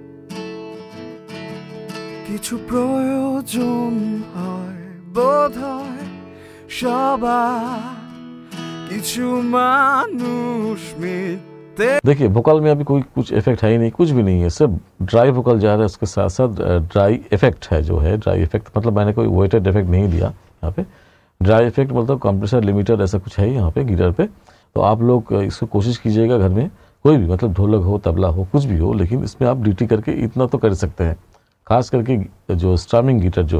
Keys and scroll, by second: 11.9 space.